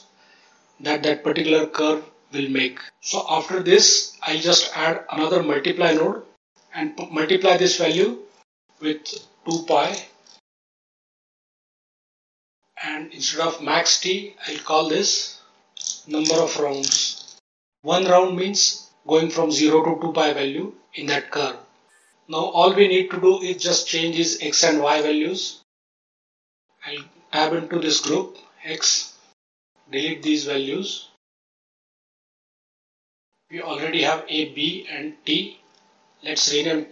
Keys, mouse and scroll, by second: 0.1 ctrl+z, 4.3 click, 4.9 shift+d, 5.2 click, 7.8-10.4 drag, 10.7-11.5 drag, 11.6 scroll down 2, 11.9 ctrl+right click, 12.1 ctrl+right click, 14.4-17.6 drag, 23.5 click, 24.8 click, 25.8 Delete, 26.1 click, 28.0 Tab, 29.5 click, 31.2 Delete, 31.9 scroll up 2, 32.2-32.6 middle drag.